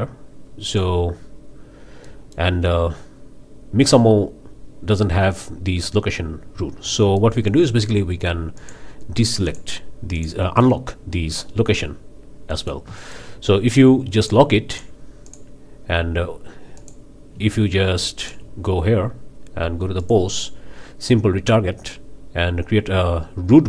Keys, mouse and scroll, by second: 0.7 click, 2.0-2.5 middle drag, 7.2 middle click, 8.6-8.9 drag, 9.5 click, 10.2 click, 12.5-12.9 middle drag, 13.0-13.3 shift+middle drag, 14.2-14.5 drag, 14.7 drag, 15.3 click, 16.8-17.1 drag, 18.2-18.5 shift+drag, 20.0 click.